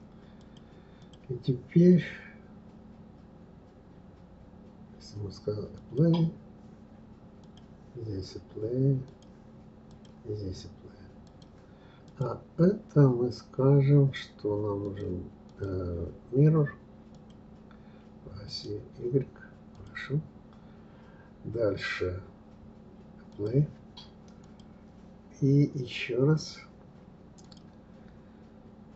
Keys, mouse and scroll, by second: 0.4 click, 0.9 click, 5.7 click, 7.4 click, 9.1 click, 9.9 click, 11.2 click, 12.0 click, 14.8 click, 15.4-18.6 drag, 19.7 click, 23.3 click, 24.4 click, 27.4-28.9 drag.